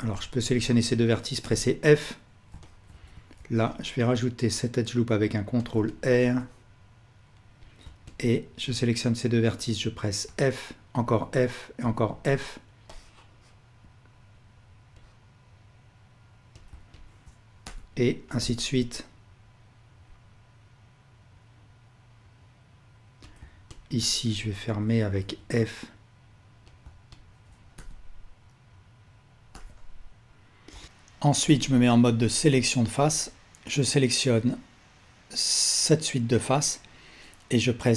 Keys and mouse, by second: 0.0 click, 0.5 shift+click, 2.6-5.7 ctrl+alt+drag, 3.4 ctrl+r, 3.9 right click, 5.9 shift+click, 6.5-7.7 drag, 8.1 shift+click, 11.1 f, 13.0-16.6 drag, 17.0 shift+click, 18.4 f, 23.2 click, 23.7 shift+click, 26.6 click, 27.1 shift+click, 27.8 f, 30.8 alt+shift+click, 33.6 alt+click.